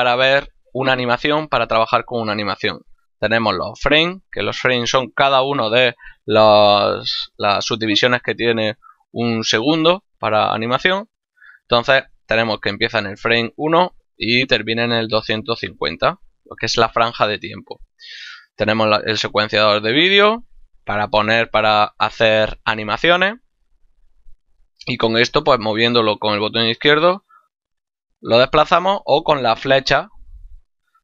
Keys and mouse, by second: 24.8 click, 29.3 Right, 30.1 Left.